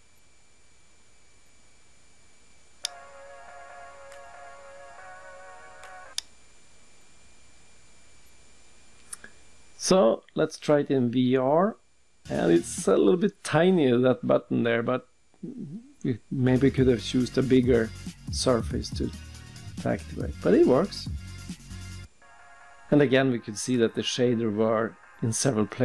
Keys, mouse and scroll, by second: 0.0-0.5 scroll down 2, 0.2 scroll up 1, 1.1 middle click, 1.1 scroll up 1, 1.7 scroll down 2, 2.6 scroll down 1, 2.8 click, 3.6 click, 6.1 click.